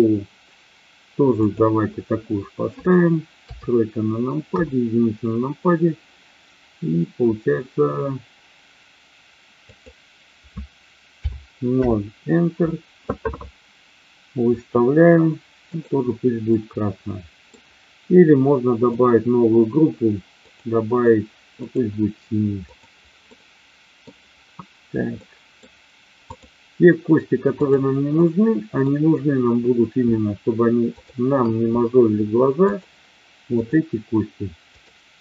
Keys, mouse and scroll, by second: 1.4 click, 3.4 KP_3, 4.4 KP_1, 9.6-12.9 drag, 15.7 click, 16.5-17.5 middle drag, 18.9 click, 20.5-21.7 drag, 22.5 click, 23.2-24.0 middle drag, 25.2 middle click, 26.2-27.0 drag, 27.6-28.5 drag, 28.5-28.9 middle drag, 30.9-31.9 shift+drag, 32.6-34.4 shift+drag, 34.6-35.2 shift+drag.